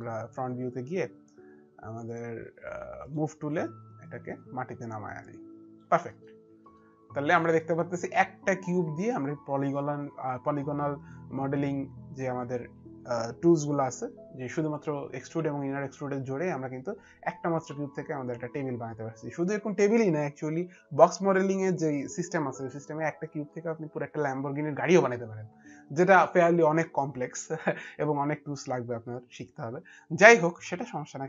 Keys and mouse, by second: 0.0 middle click, 2.8 click, 3.8 click, 5.8 middle click, 6.4 middle click, 7.3 alt+click, 10.1 middle click, 10.1 alt+click, 15.7 alt+click.